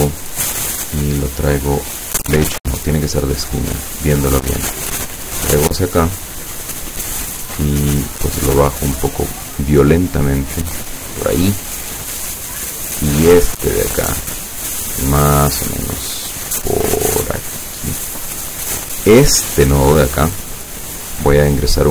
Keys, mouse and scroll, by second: 1.1-2.5 drag, 2.5 ctrl+z, 3.4 click, 3.9 click, 4.7-6.6 drag, 8.1 click, 10.0-11.3 drag, 13.5-18.1 drag, 18.3 click.